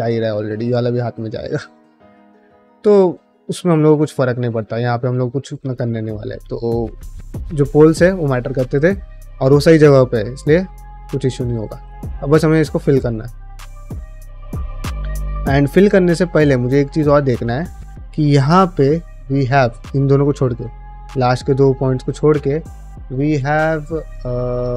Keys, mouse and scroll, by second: 0.1 middle click, 1.0-3.1 middle drag, 3.9 middle click, 6.6 middle click, 8.9 middle click, 10.0 middle click, 10.6 1, 11.0 middle click, 11.6 2, 11.9 middle click, 12.6 1, 12.9 click, 13.2 middle click, 14.3 middle click, 15.2 click, 15.5-16.6 middle drag, 17.3 ctrl+click, 19.2 middle click, 20.3 middle click, 21.0 middle click.